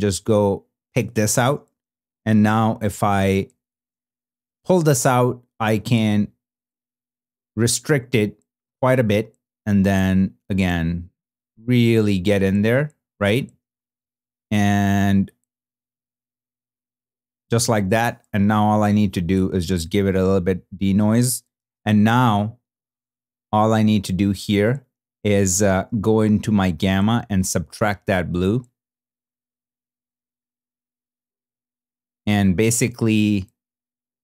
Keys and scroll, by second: 2.2 shift+h, 3.6 shift+z, 21.5 shift+h.